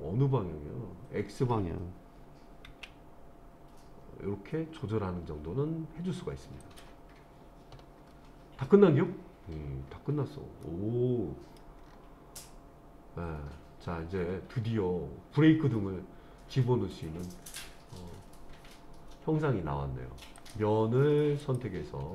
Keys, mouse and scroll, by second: 0.0 g, 2.7 x, 6.6 click, 10.6-11.6 middle drag, 11.9-12.2 scroll down 2, 12.5-17.7 middle drag, 20.4 click, 21.4 click.